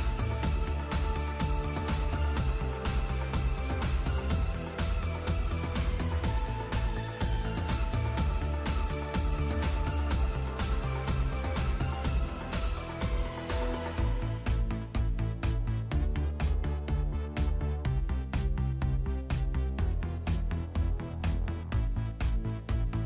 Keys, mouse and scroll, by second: 2.8 KP_5, 3.0 KP_3, 3.6 scroll down 4, 3.8 middle click, 4.2 alt+a, 4.3 scroll up 2, 4.6 right click, 4.9 right click, 5.5 right click, 6.2 alt+a, 6.8 right click, 8.7 click, 11.6 click, 13.5 click, 14.7 click, 17.1 i, 19.7 click, 22.1 click.